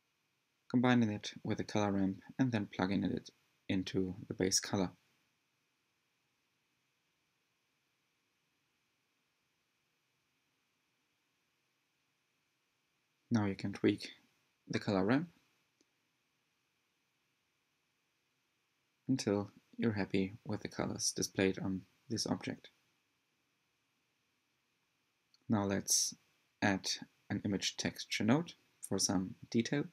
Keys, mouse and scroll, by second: 0.8 click, 1.7 scroll down 1, 1.9-2.6 middle drag, 2.6 scroll up 1, 2.8-5.0 shift+middle drag, 5.0 click, 5.8-7.5 drag, 7.8 click, 9.5 click, 11.9 click, 16.8 click, 18.0 click, 18.4-18.9 middle drag, 19.6-20.0 scroll up 1, 21.7-24.5 drag.